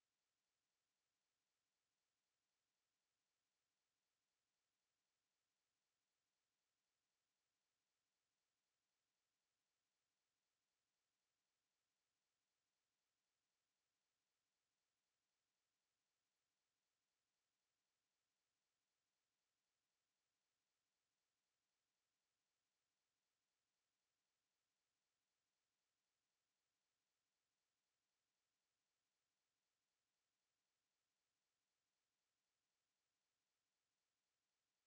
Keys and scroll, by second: 4.0 ctrl+4, 14.2 ctrl+4, 24.5 ctrl+4.